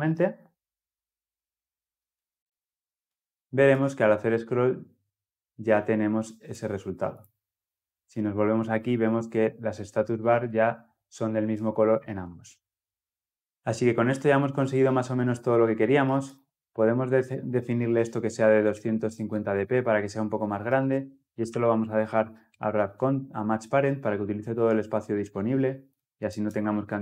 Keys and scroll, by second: 22.2 Return.